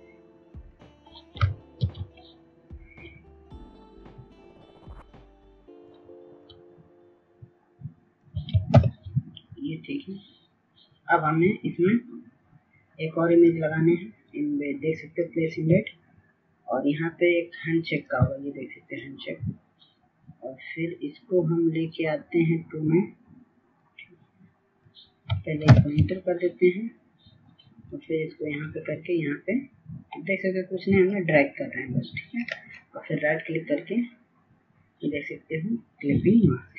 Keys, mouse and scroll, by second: 1.1 click, 3.0 ctrl+z, 4.4 click, 5.5 ctrl+t, 7.7-12.2 shift+drag, 12.6 Return, 15.0 click, 19.1-28.7 drag, 29.4 Return, 31.7-35.3 drag, 36.3 right click.